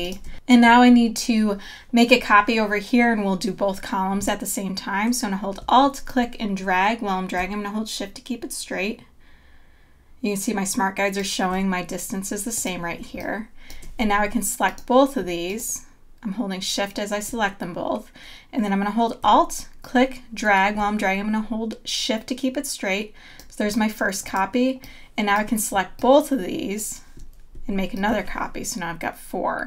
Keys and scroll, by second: 0.2 space, 13.0 space.